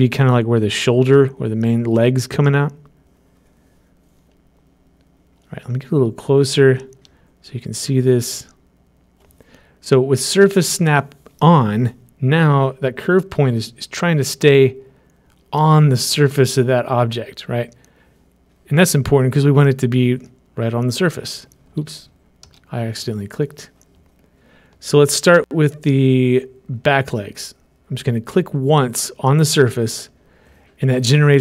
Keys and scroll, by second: 23.0 ctrl+z.